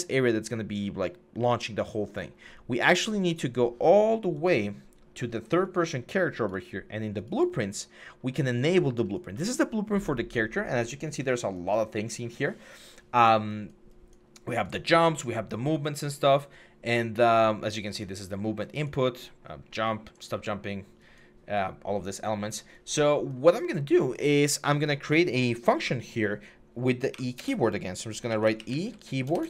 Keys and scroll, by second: 26.9 typing, 28.1-29.4 typing.